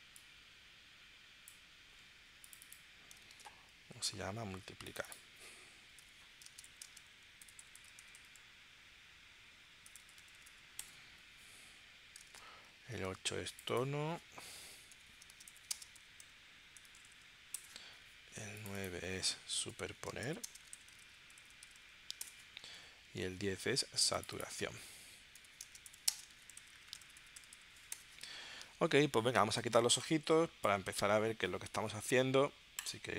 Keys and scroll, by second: 3.3 super+Tab, 4.1 super+Tab, 6.0-8.2 typing, 9.9-10.3 typing, 10.8 Return, 12.3 super+Tab, 13.1 super+Tab, 14.9-17.1 typing, 17.5 Return, 19.7-21.8 typing, 22.2 Return, 22.7 super+Tab, 23.3 super+Tab, 25.3-27.5 typing, 27.9 Return.